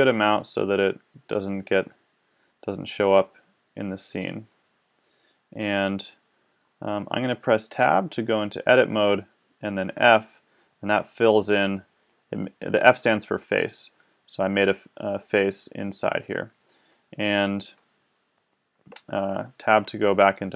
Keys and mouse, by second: 1.4-4.9 middle drag, 7.8 Tab, 10.0 f, 18.8 Tab.